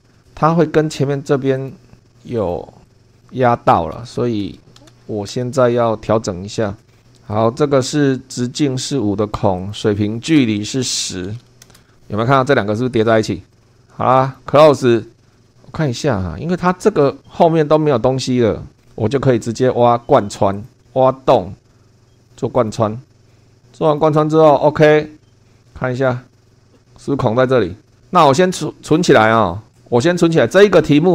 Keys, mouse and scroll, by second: 0.1-1.1 scroll up 2, 1.6 click, 2.4 click, 2.9 click, 3.0 Escape, 3.2 click, 3.9-5.4 typing, 7.3 click, 9.6 click, 10.6-11.9 typing, 13.5 click, 14.2 click, 15.2 middle click, 15.5 shift+middle click, 20.6 click, 22.6 click, 23.0 click, 23.8 click, 26.0 click, 26.5 middle click, 26.7 click, 27.8 scroll down 1, 28.9 click.